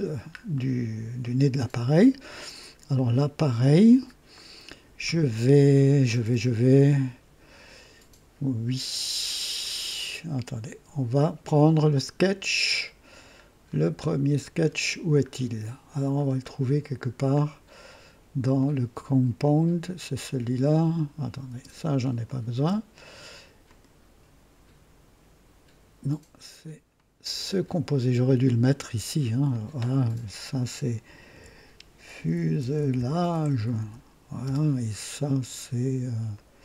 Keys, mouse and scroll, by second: 0.5 right click, 1.2 right click, 2.3 scroll up 1, 2.9 right click, 3.6-4.1 scroll up 1, 4.3 right click, 13.6 scroll down 1, 15.2-15.5 scroll up 1, 16.1-16.4 scroll down 1, 16.9 scroll down 1, 19.3 click, 21.4 space, 21.5 space, 22.1 click, 22.5 space, 23.6 click, 26.8 click, 27.4 click, 29.4 click, 31.2 F2, 31.8-34.2 typing, 34.4 Return, 36.2 click.